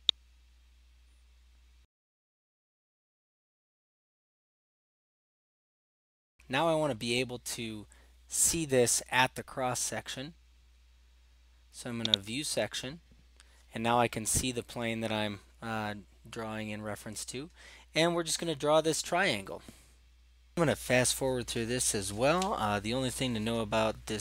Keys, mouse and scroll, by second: 4.0 middle click, 4.3 middle click, 12.3 click, 20.7 click, 21.2 middle click, 21.3 middle click, 21.8 click, 22.0 click, 22.5 click, 22.5 right click, 23.4 click, 24.0 click.